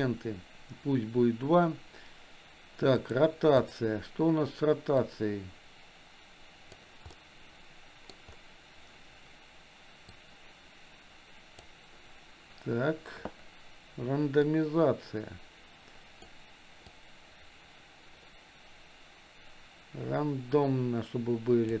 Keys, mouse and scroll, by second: 3.1-3.8 drag, 5.0-6.9 drag, 7.2-8.3 middle drag, 10.4-12.0 drag, 14.6-16.3 drag, 17.4-21.8 drag.